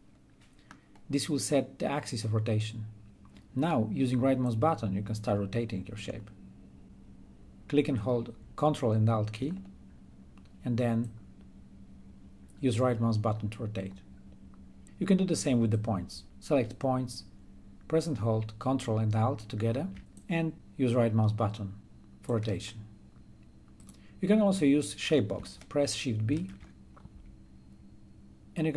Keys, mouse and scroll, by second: 4.3-8.2 ctrl+alt+right drag, 9.0 ctrl+alt+right click, 10.6-15.8 ctrl+alt+right drag, 19.9-21.0 drag, 21.0 right click, 21.0-26.1 ctrl+alt+right drag, 26.0 click, 26.2 shift+b, 28.5-28.7 drag.